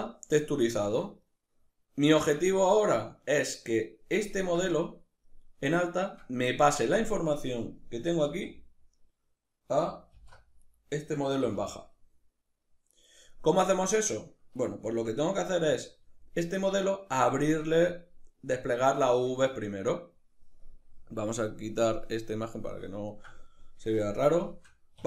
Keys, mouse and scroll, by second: 7.9 z, 9.8 alt+h, 10.3 right click, 11.1 g, 12.7 right click, 14.5 Tab, 15.3 a, 16.3-21.5 middle drag, 21.5-22.7 drag, 22.7-25.0 ctrl+middle drag, 24.6 2.